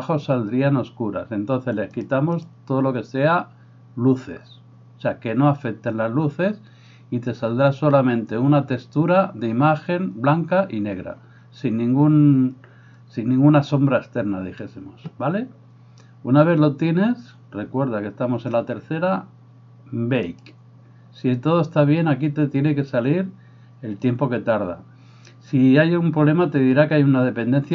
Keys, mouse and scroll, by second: 20.3-27.7 drag.